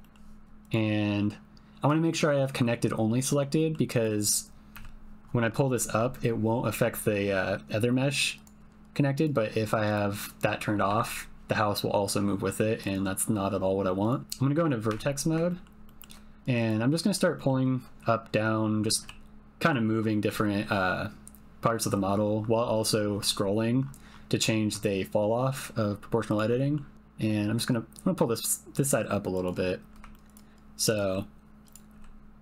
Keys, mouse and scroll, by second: 0.0 middle click, 0.6-3.4 drag, 3.5 middle click, 4.0 click, 4.7 g, 9.1-10.2 drag, 10.8 g, 14.1 click, 14.9 1, 15.4 shift+middle click, 15.8 shift+middle click, 16.5 click, 17.0 shift+middle click, 17.4 click, 19.0 g, 26.2 click, 26.5 middle click, 26.9 g, 29.3 click, 30.1 shift+middle click, 30.1 g, 30.9 click, 31.3 g, 31.6 click, 31.9 g.